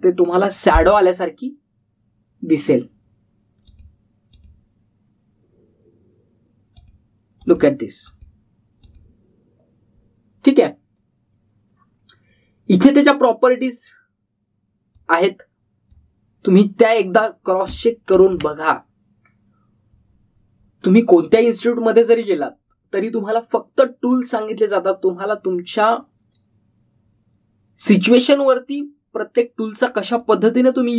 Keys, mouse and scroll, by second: 4.6 click, 8.4 click, 13.3 scroll down 1, 15.9-17.1 click, 19.1 ctrl+z, 30.4 scroll down 1.